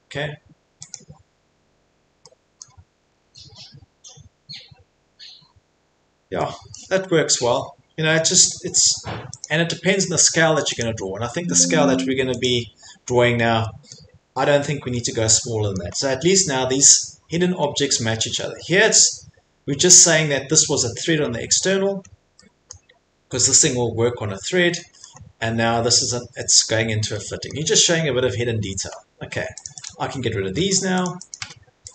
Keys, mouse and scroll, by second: 0.9 click, 1.8 middle click, 1.8 middle click, 2.0 middle click, 2.6 middle click, 3.0 Escape, 3.2 Escape, 3.8-4.7 scroll, 4.7-5.0 scroll, 6.7 middle click, 9.2 scroll, 9.4 click, 10.8 click, 12.4 click, 13.1-13.6 scroll, 13.9-15.2 scroll, 14.1 middle click, 15.7 middle click, 16.0-16.8 scroll, 16.8 scroll, 17.4 scroll, 17.6 middle click, 18.4 middle click, 18.6 middle click, 18.7 middle click, 22.1-22.7 scroll, 22.7 scroll, 24.8 middle click, 25.0 middle click, 25.2 middle click, 25.3 middle click, 26.0 middle click, 26.3 middle click, 26.7 middle click, 26.8 middle click, 27.5 middle click, 27.8-28.2 scroll, 28.3-28.8 scroll, 28.9-29.3 scroll, 29.6 click, 29.8 click, 30.2 middle click, 30.6 Delete, 31.1 click, 31.3 click, 31.4 Delete.